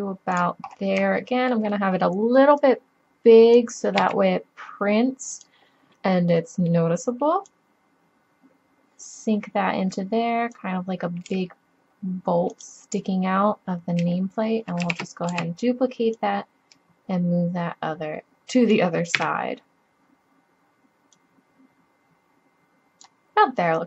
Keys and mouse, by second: 2.6 middle click, 3.1-4.7 drag, 4.0 s, 5.9-6.3 drag, 6.5 click, 7.6-8.4 middle drag, 11.3 s, 12.6 click, 14.9 shift+d, 15.6-16.1 drag, 18.0 click, 19.2 KP_7, 21.2 click, 23.1-23.8 middle drag.